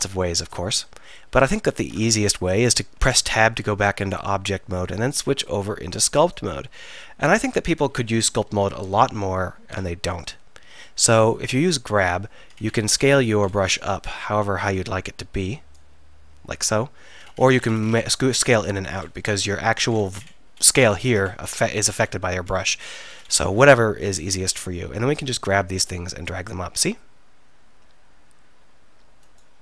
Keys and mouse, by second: 1.9 Tab, 6.5 click, 7.5-7.9 drag, 8.4 KP_1, 8.8 KP_3, 25.6-27.4 drag.